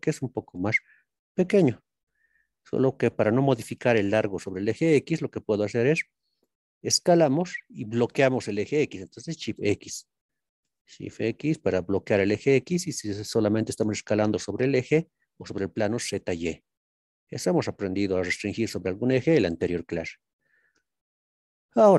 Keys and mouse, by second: 9.5 shift+x, 12.1 click, 18.5 shift+middle click.